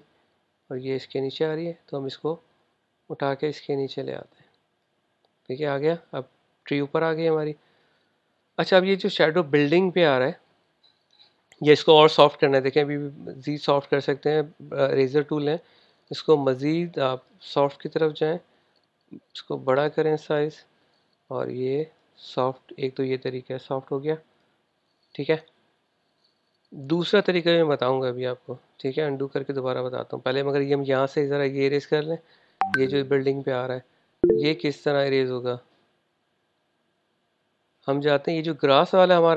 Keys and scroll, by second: 32.1 v.